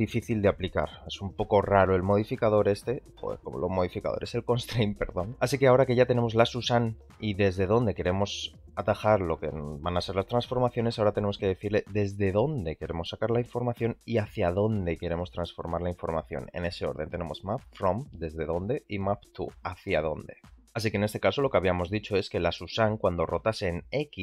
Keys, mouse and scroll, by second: 14.5 click, 22.7 r.